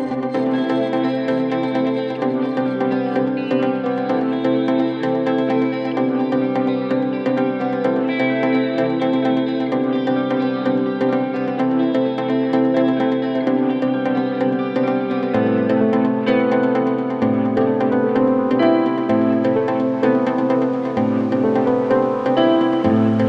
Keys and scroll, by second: 10.2 c, 20.5 F3.